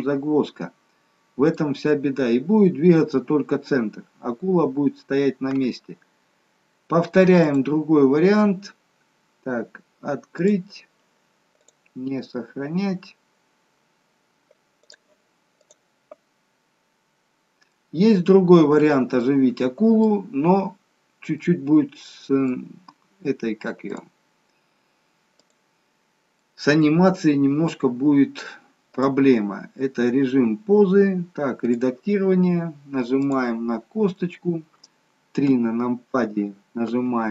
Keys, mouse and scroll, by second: 1.6-2.7 scroll down 2, 4.0 scroll up 2, 7.4 click.